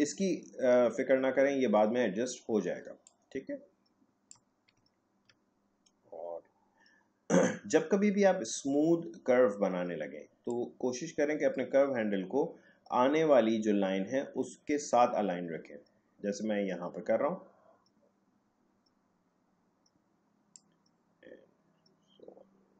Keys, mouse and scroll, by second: 2.7 space, 3.0 click, 3.4 space, 5.0 alt+scroll down 1, 10.5-20.4 drag.